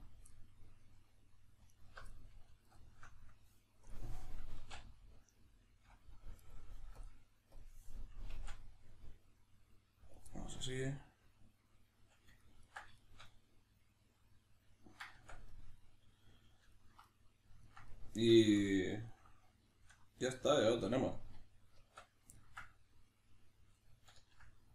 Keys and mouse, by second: 0.0 right click, 0.3-1.7 middle drag, 1.7 alt+right click, 2.1-2.7 middle drag, 2.7 alt+shift+right drag, 3.8-4.5 drag, 4.5 s, 6.5 right click, 7.0-10.2 drag, 8.3 s, 10.3-22.3 middle drag, 15.1 Tab, 21.7 Tab, 23.0 click, 24.2 ctrl+middle click.